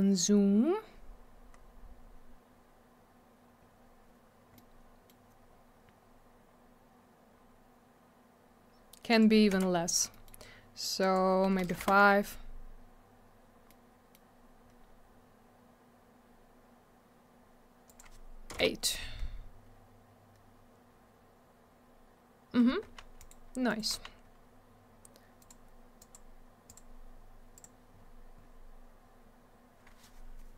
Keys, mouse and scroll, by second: 0.5 scroll up 1, 1.5-2.7 scroll down 1, 3.6-3.9 scroll up 1, 4.5 middle click, 5.9-7.4 scroll up 1, 7.4-7.7 scroll down 1, 9.1 click, 9.2 click, 9.5 m, 10.1 middle click, 10.2 middle click, 11.0 click, 11.1 click, 11.7 5, 11.8 Return, 13.7 middle click, 14.6-15.9 scroll up 1, 16.2-17.1 scroll down 1, 17.8 click, 17.9 click, 18.5 8, 18.5 Return, 20.3-21.5 scroll up 1, 21.8-22.6 scroll down 1, 23.2 right click, 23.3 right click, 23.7 right click, 23.8 right click, 25.4 click, 25.5 click, 26.0 click, 26.1 click, 26.7 click, 26.7 click, 27.5 click, 27.6 click, 27.9 scroll down 1.